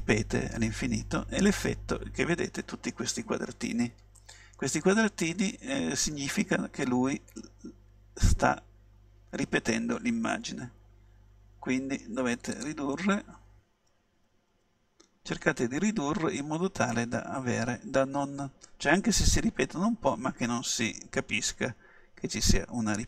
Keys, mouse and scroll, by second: 12.8-14.5 drag, 14.6 s.